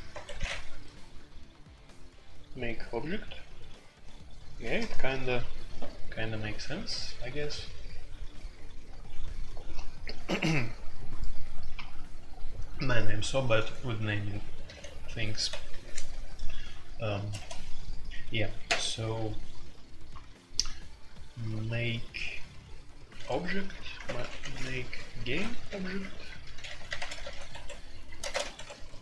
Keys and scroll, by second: 0.0-0.6 typing, 14.6 shift+a, 15.4 Escape, 17.3 shift+a, 23.3-29.0 typing, 27.5 Escape.